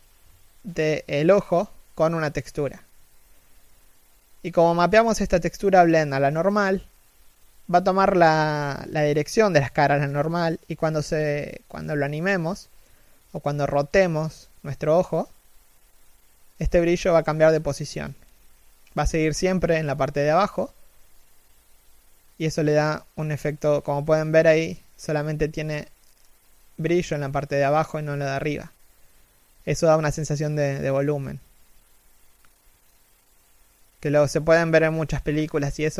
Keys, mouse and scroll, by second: 19.7 z, 20.4 KP_3, 20.9-21.2 scroll up 1, 21.4 a, 22.9 Tab, 23.0 a, 23.5 alt+right click, 24.7 alt+shift+middle click, 25.1 g, 31.9 o, 35.1-35.7 scroll up 1, 35.7 alt+right click.